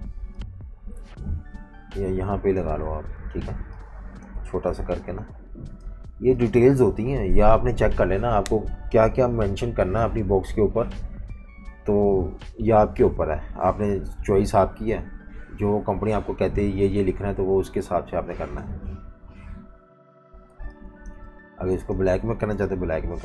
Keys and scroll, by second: 7.3 F18, 18.6 F19, 19.6 super+-, 19.7 super+-, 20.5-22.5 typing.